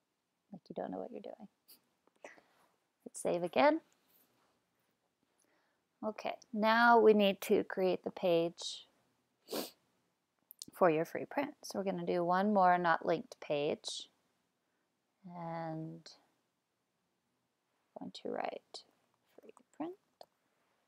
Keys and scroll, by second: 18.6-20.7 typing.